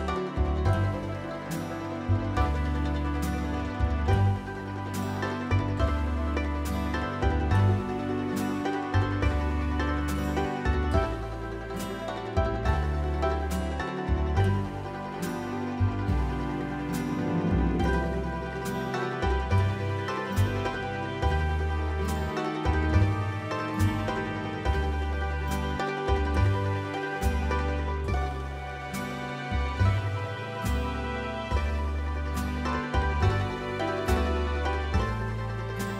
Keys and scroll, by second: 0.3 space, 12.3 Return, 12.5 t, 18.7-20.4 typing, 24.6 s, 27.1-28.1 typing, 32.3-33.0 typing, 35.7-35.9 typing.